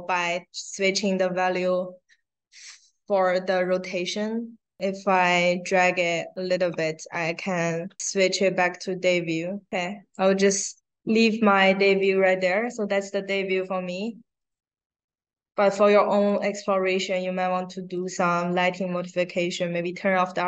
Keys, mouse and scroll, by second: 4.0-6.5 drag, 7.9-10.1 drag, 13.3 click, 14.3 click, 15.7 click, 17.3 click.